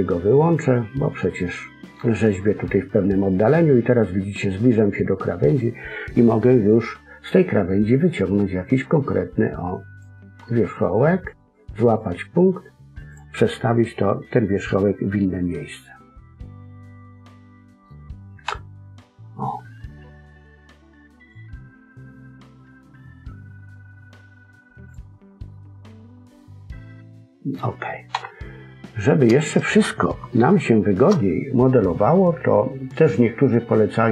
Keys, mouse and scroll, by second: 0.7 middle click, 8.6 click, 11.2 click, 13.5 middle click, 18.4 KP_1, 19.1-21.2 scroll up 2, 21.2 click, 25.1-27.0 scroll down 5, 25.4 middle click, 28.1 KP_1, 28.6-29.0 scroll up 2, 29.0-30.1 scroll down 2, 30.2 shift+middle click.